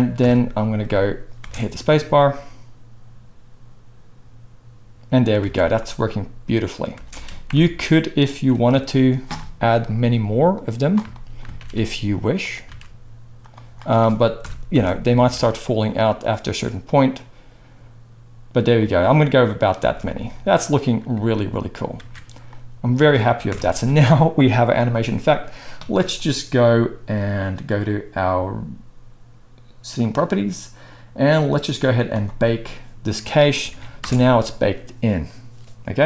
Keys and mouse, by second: 0.2 KP_0, 1.4 space, 5.4 alt+a, 6.9 space, 7.5 shift+Left, 8.6 KP_1, 9.5-10.5 shift+middle drag, 10.5-12.5 drag, 11.5 shift+d, 12.5 shift+middle click, 12.8 shift+d, 14.4 KP_0, 14.7 space, 15.2 alt+a, 18.7-32.1 middle drag, 19.8 space, 22.0 ctrl+s, 23.4 KP_0, 32.1-36.0 drag, 33.7 ctrl+s, 34.0 space.